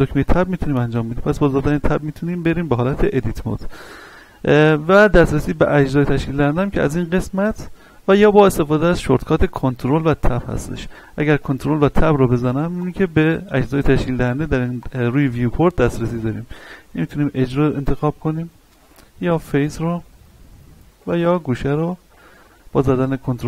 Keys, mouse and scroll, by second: 1.6 Tab, 7.4 click, 11.3 ctrl+Tab, 12.8 click, 14.0 ctrl+Tab, 14.8 click, 15.8 ctrl+Tab, 16.9 click, 17.3 right click, 18.8 ctrl+Tab, 19.3 click, 19.6 right click, 20.8 ctrl+Tab, 21.3 click, 21.9 right click, 22.8 ctrl+Tab.